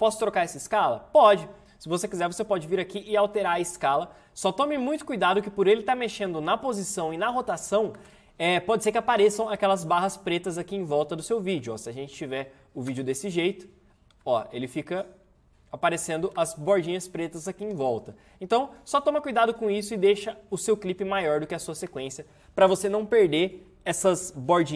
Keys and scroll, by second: 8.0 space, 11.6 space, 16.3 space, 21.8 space.